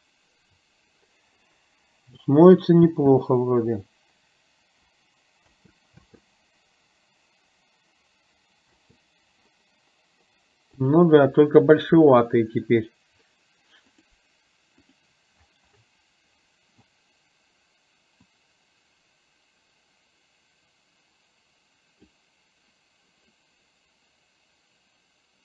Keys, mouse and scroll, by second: 3.2 space, 5.6 space, 6.2 space, 8.9 space, 10.9 click, 13.9 click, 18.5 click, 21.5 click.